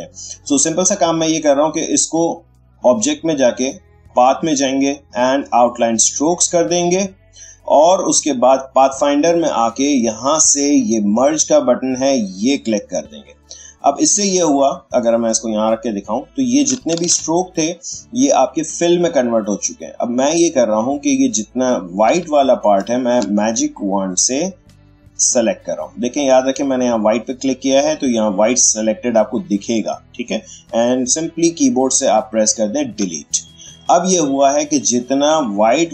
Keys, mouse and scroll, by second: 2.5 click, 6.1 click, 8.8 click, 12.4 click, 14.7-16.9 drag, 16.9 ctrl+z, 20.1 click, 22.2 space, 22.4 ctrl+click, 22.8 ctrl+space, 25.2 click, 28.8 click, 32.8 Delete, 34.5 click, 35.4 ctrl+space, 35.6-35.9 ctrl+drag.